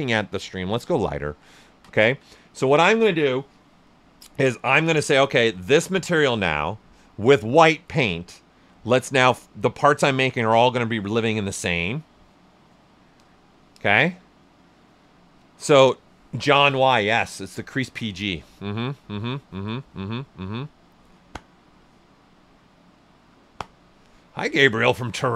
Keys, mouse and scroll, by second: 0.8 click, 0.9 alt+right click, 1.7 ctrl+right click.